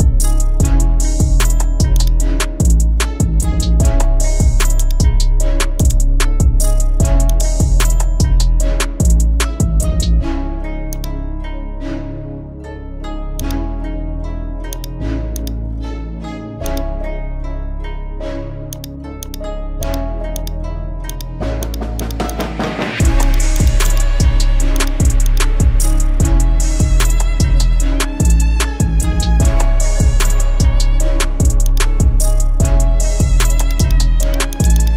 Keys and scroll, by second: 3.4 ctrl+t, 8.6 Return, 12.8 ctrl+i, 15.8 x, 18.3 x, 26.7 x, 33.3 x.